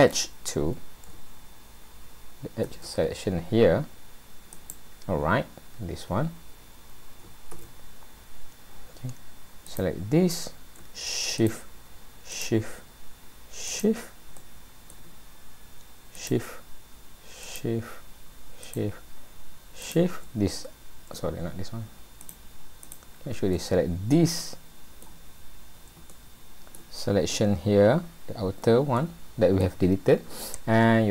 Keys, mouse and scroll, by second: 9.7 click, 11.4 shift+click, 12.3 click, 13.7 shift+click, 14.4 middle click, 16.2 shift+click, 17.7 shift+click, 18.8 shift+click, 19.8 shift+click, 22.2 shift+click, 22.8 shift+click, 23.6 middle click, 26.1 shift+middle click, 27.0 scroll up 1, 28.9 scroll up 1, 29.0 middle click, 30.2-31.0 scroll down 2.